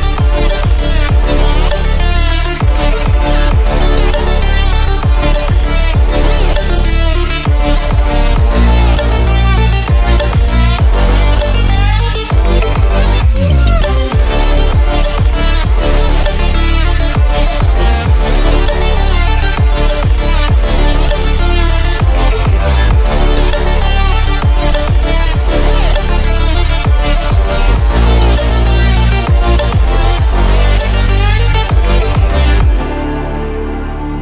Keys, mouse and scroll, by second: 9.2-26.2 drag, 26.7 p, 28.1 ctrl+click, 32.1 alt+shift+scroll up 1.